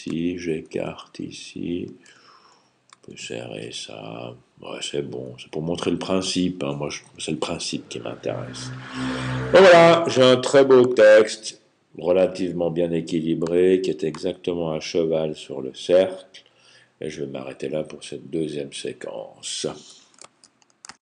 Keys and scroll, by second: 0.0-1.2 typing, 0.8 alt+Right, 2.0 Left, 2.9 alt+Left, 3.9 typing, 4.9 Right, 7.6 typing.